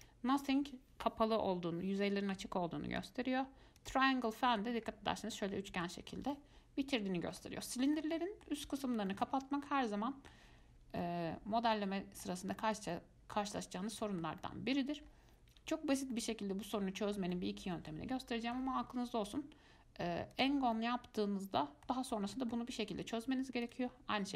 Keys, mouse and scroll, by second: 3.2-4.5 drag, 4.5 middle click, 5.0-5.5 scroll up 3, 5.5 middle click, 6.1-6.5 scroll down 3, 6.5-13.9 middle drag, 13.9 scroll down 1, 14.0 scroll up 1, 14.2-15.2 shift+middle drag, 15.2 scroll down 1, 15.3-15.9 scroll up 3, 15.9-18.2 shift+middle drag, 18.2 scroll down 1, 18.5 shift+middle click, 19.5-20.9 drag, 20.9-23.9 middle drag, 23.9-24.3 drag.